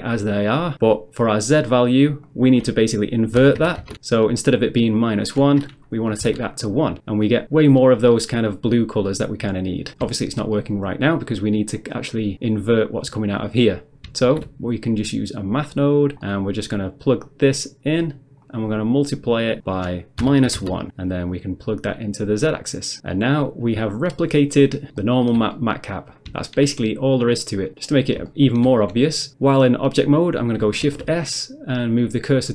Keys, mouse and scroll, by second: 0.0 click, 2.3 click, 3.4-3.8 typing, 3.8 Return, 5.0 click, 6.2 1, 6.2 Return, 8.1 middle click, 9.9 middle click, 10.1 shift+middle click, 11.8 click, 12.5 click, 13.1 click, 13.5 middle click, 13.7 middle click, 14.3 shift+a, 15.8 click, 16.1 click, 16.2 middle click, 16.5 middle click, 17.2 click, 18.0 click, 18.4 click, 18.5 click, 19.6 click, 19.7 click, 20.2-20.6 typing, 20.6 Return, 21.3 click, 22.5 click, 23.1 middle click, 24.6 middle click, 25.0 shift+middle click, 27.7 middle click, 27.9 middle click, 28.3 shift+middle click, 29.3 Tab, 30.8 shift+s, 32.3 click.